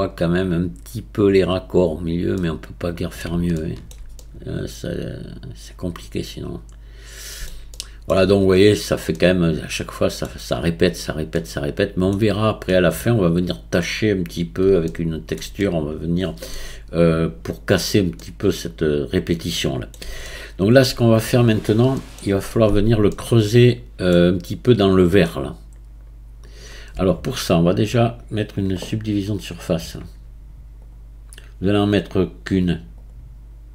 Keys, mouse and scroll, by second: 0.1-0.8 scroll up 2, 2.0-2.4 scroll down 2, 2.4-7.2 middle drag, 7.7-14.4 shift+middle drag, 14.4-14.9 scroll down 2, 14.9-26.2 shift+middle drag, 26.5 click, 28.4-32.8 drag, 33.0-33.7 drag.